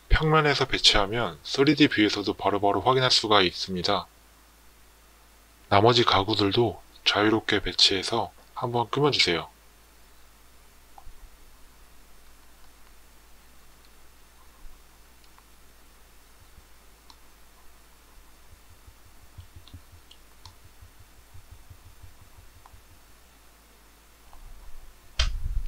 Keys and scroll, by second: 17.6 Escape.